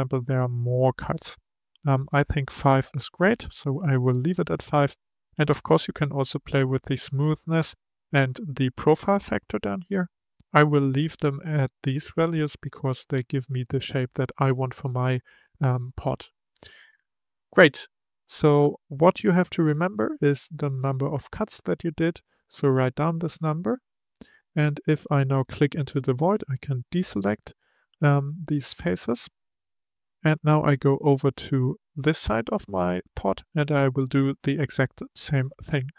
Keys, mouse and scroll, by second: 2.0-3.3 drag, 25.8 click, 28.0 scroll down 2, 28.8-30.7 middle drag, 30.7-31.4 scroll up 2, 31.4 shift+middle click, 32.2-35.1 scroll up 1, 35.1-35.7 scroll up 1.